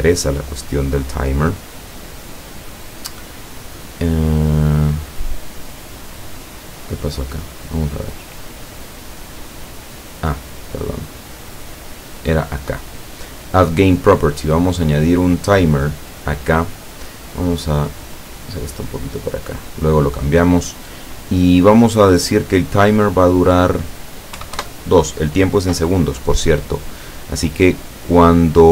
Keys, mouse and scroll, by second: 6.4 click, 7.6 click, 8.9 click, 11.6 click, 14.4-14.8 scroll up 1, 15.0-18.1 scroll up 1, 18.1-20.0 drag, 23.2 click, 24.4 KP_2, 24.6 KP_Enter, 27.6-28.7 drag.